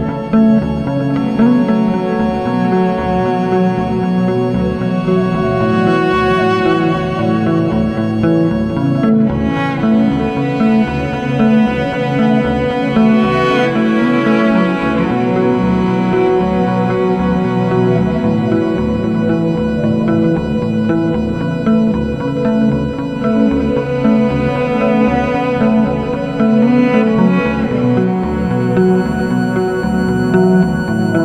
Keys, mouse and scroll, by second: 0.4 click, 0.6 click, 0.9 1, 1.5 Return, 2.7 scroll, 3.5 scroll, 4.1 scroll, 4.7 click, 5.4 right click, 6.7 click, 7.2 scroll, 9.1-9.6 scroll, 10.2 click, 11.8 scroll, 12.0 click, 12.2 click, 13.2 2, 13.7 Return, 15.1 scroll, 16.1 scroll, 17.4 click, 19.2 click, 19.4 click, 20.0 2, 20.4 Return, 22.7 click, 24.2 click, 24.4 click, 25.2 typing, 26.1 Return, 27.3 scroll, 28.8-29.3 scroll, 30.8 ctrl+alt+scroll.